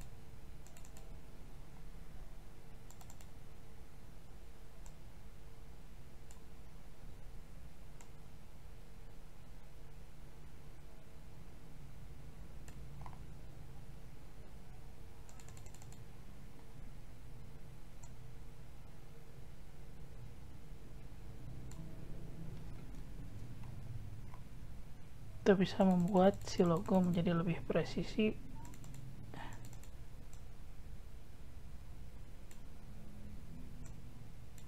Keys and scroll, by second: 23.2 ctrl+z.